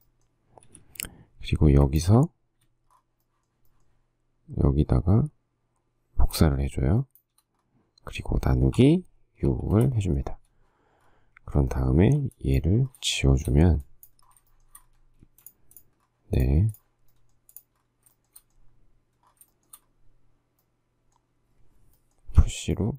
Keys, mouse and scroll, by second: 0.8 m, 2.0 ctrl+click, 3.1 shift+scroll, 3.5 shift+middle click, 4.0 shift+middle click, 7.2 shift+click, 9.0 /, 9.7 6, 9.9 Return, 11.6 space, 12.3 e, 13.3 shift+middle click, 14.7 shift+middle click, 15.4 space, 18.4 shift+middle click, 19.7 shift+middle click, 22.6 p.